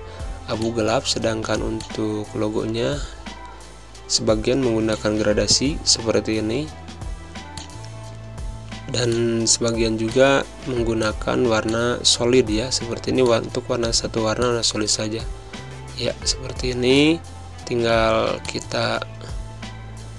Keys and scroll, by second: 0.9 i, 3.8 g, 14.2 space, 15.1 ctrl+a, 17.3 ctrl+a.